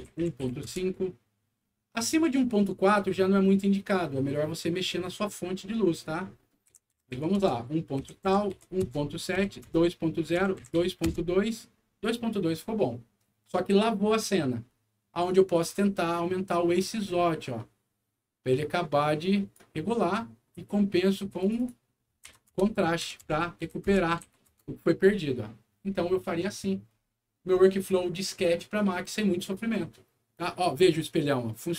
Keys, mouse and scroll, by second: 0.0-0.4 typing, 0.6 Return, 3.0 scroll down 1, 6.6-9.3 typing, 7.3 Return, 8.8 Return, 9.6 Return, 10.3 KP_2, 10.8 KP_2, 11.0 Return, 16.4-19.5 drag, 21.3 click, 21.5 click, 22.2 2, 22.5 Return, 22.9 KP_3, 23.2 Return, 23.5 KP_4, 23.8 Return, 24.2 KP_5, 24.5 Return, 30.8 scroll up 1.